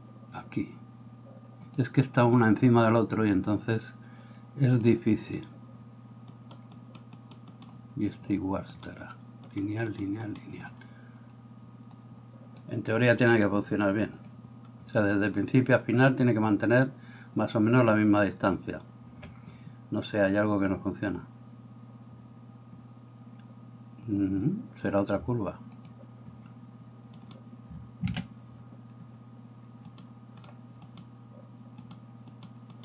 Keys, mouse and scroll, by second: 6.4 right click, 6.8-12.2 middle drag, 6.8 right click, 7.5 right click, 8.7 right click, 9.4 right click, 9.9 right click, 10.3 right click, 24.6-27.2 middle drag, 27.2 right click, 27.3-30.9 middle drag, 28.1 Escape, 29.9 right click, 30.9 right click, 31.1 middle click, 31.9 right click, 32.0 middle click, 32.3 right click, 32.4-32.8 middle drag.